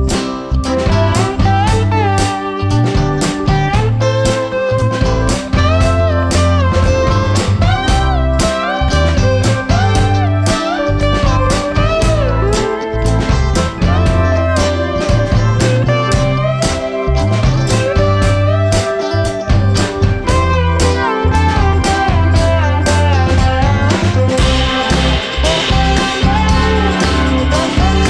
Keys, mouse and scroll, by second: 0.0 click, 1.3 click, 5.0 click, 6.1-7.5 drag, 8.3-10.3 drag, 10.6-12.7 drag, 12.9 KP_0, 15.2-17.2 drag, 19.9 click, 21.0-21.9 drag, 21.9-22.6 scroll down 1, 22.6-24.6 drag, 25.4-27.0 drag, 27.0 KP_0.